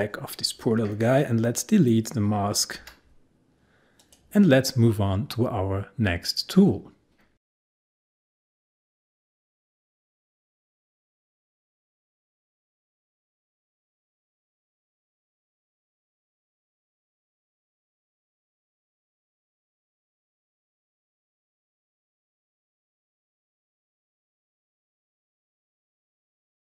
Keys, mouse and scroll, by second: 0.9 click, 1.1 click, 2.8 Delete, 4.0 click.